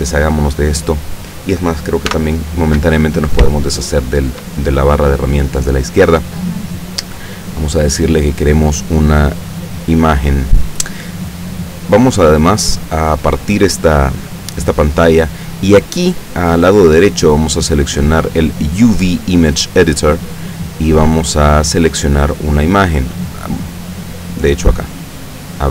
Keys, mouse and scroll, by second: 2.2 t, 3.6-4.6 shift+drag, 7.0 click, 9.6 click, 12.4-15.5 drag, 17.5 click, 19.9 click, 22.3 click, 23.4 click, 24.4 click, 25.5 click.